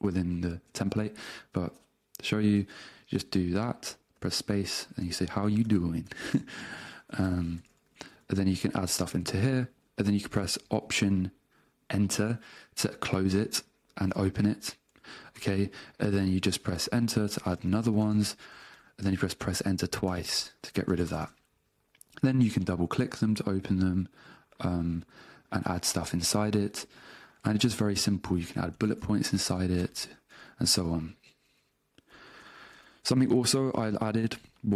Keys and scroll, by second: 4.2-7.8 typing, 8.0 Return, 9.2 space, 12.9 alt+Return, 16.8 Return, 17.8 space, 18.0 Return, 18.8 k, 19.2 Return, 28.2 -, 28.4 space, 29.2 space, 29.4 Return, 30.0 space, 30.4 Down, 31.4-33.0 typing, 33.2 Return, 34.0 space.